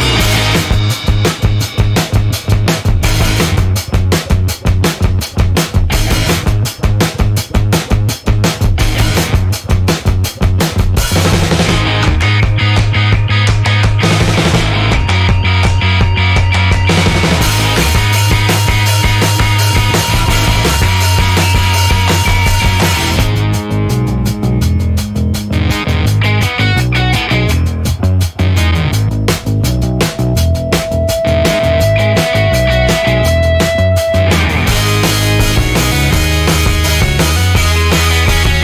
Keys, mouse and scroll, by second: 0.2 click, 1.7 click, 5.8 click, 7.8 click, 10.0 click, 11.0 click, 12.1 click, 12.9 click, 14.1-14.4 scroll down 1, 15.1 scroll down 1, 16.0 click, 17.4 click, 20.0 click, 20.5 click, 21.6 BackSpace, 23.4 1, 23.7 0, 25.7 shift+8, 28.7 5, 29.2 0, 31.8 click, 33.0 /, 33.3 1, 34.1 3, 36.9 click.